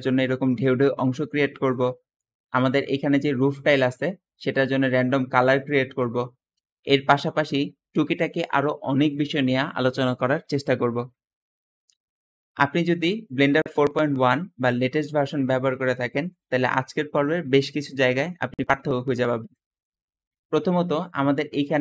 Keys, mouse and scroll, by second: 11.8 `, 13.8 Escape, 19.5 middle click, 19.9-21.3 middle drag, 19.9-21.5 scroll down 2, 21.3 click, 21.6 g.